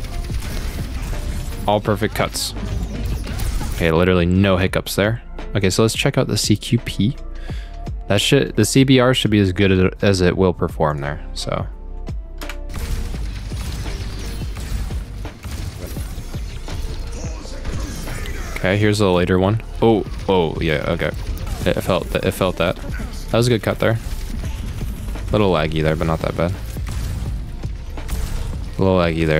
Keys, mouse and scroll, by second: 3.6 space, 4.2-5.4 scroll down 8, 6.2 middle click, 6.4 scroll up 1, 10.9 click, 11.6-11.9 scroll up 1, 12.4 space, 13.0 middle click, 16.2 middle click.